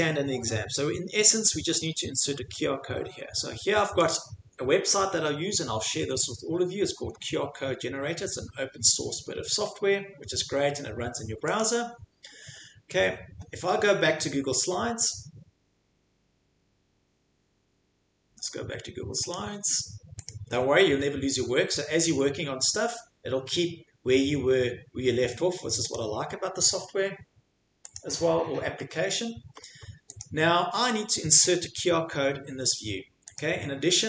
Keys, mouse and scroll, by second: 4.1 click, 11.6 click, 19.3 click, 20.3 click, 25.9 click, 28.0 click, 30.2 click, 33.4 click.